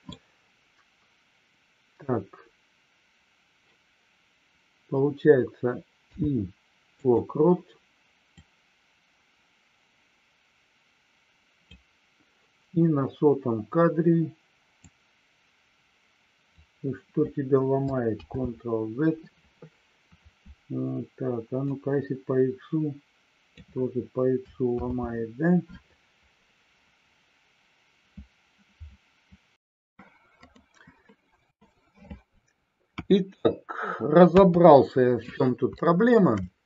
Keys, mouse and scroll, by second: 8.4-35.8 drag.